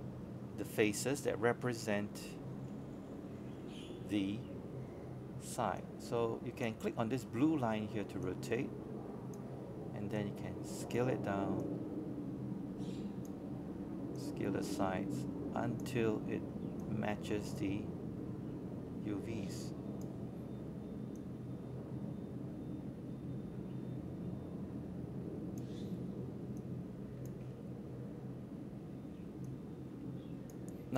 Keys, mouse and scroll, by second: 4.7 scroll down 1, 10.1-11.9 drag, 12.0 scroll up 1, 13.2 click, 15.5 scroll up 1, 16.4-18.9 drag, 20.2 alt+middle click, 23.3-30.9 drag.